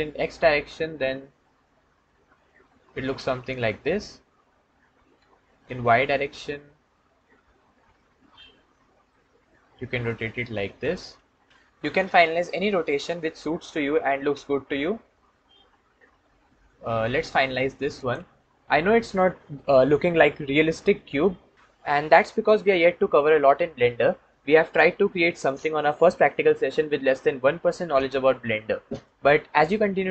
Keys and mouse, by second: 4.9 r, 5.3 y, 10.7 click, 12.6 r, 12.8 x.